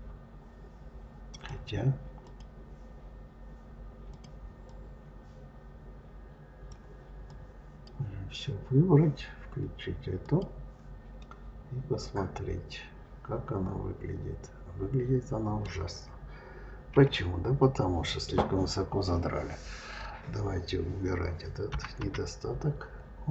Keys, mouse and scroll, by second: 1.2 click, 2.1 click, 3.9 click, 4.5-7.1 drag, 10.1 click, 11.1-14.0 middle drag, 16.8 KP_3.